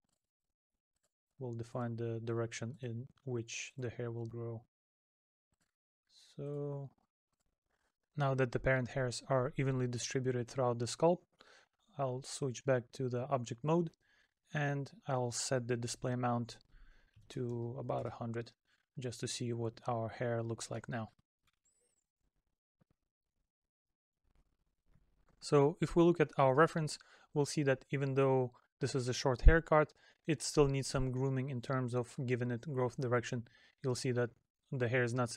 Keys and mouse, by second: 3.2 middle click, 19.1 middle click.